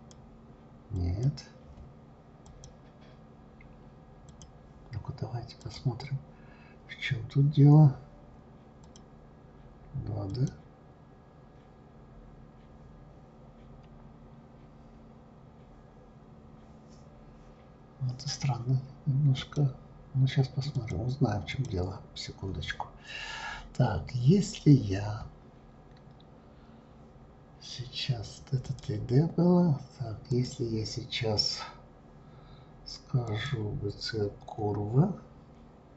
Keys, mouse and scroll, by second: 4.3 click, 5.6 click, 8.8 click, 10.3 click, 19.3 click, 20.7 click, 21.5 click, 23.1 scroll up 1, 24.7-27.7 scroll down 1, 28.6 click, 30.3 click, 33.3 click.